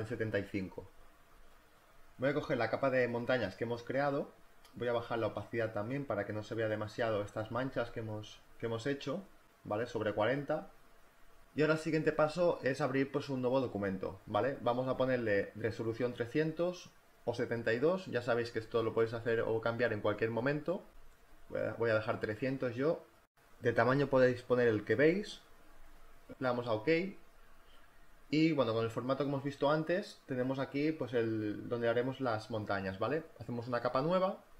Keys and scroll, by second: 15.6-16.5 typing, 18.1-20.0 typing, 21.4-22.8 typing, 23.8 3, 24.1 0.